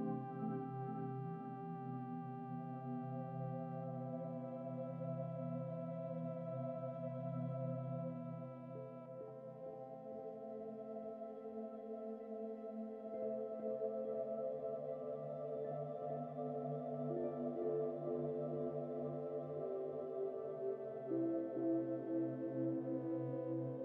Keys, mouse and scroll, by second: 0.1 Tab, 0.9 a, 2.6-3.9 scroll up 16, 5.0 right click, 5.4 n, 6.0-7.1 right drag, 7.1 u, 9.2-9.8 scroll down 3, 9.8-10.7 scroll down 1, 11.7 click, 15.4 click, 16.9 Tab, 17.3 click, 17.9 click, 19.0 click, 19.9 Tab, 20.5-21.2 scroll down 9, 21.2 a, 22.5 s.